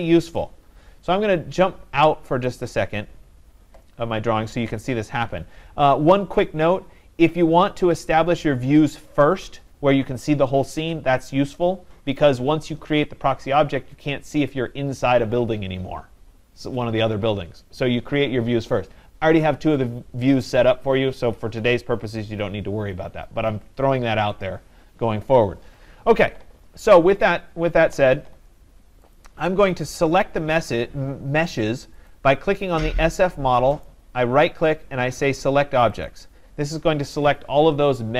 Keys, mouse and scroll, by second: 2.5 right click, 2.7-3.4 scroll, 4.0-5.7 scroll, 27.3 click, 29.2 click, 32.1 click, 33.9 right click, 36.1 click.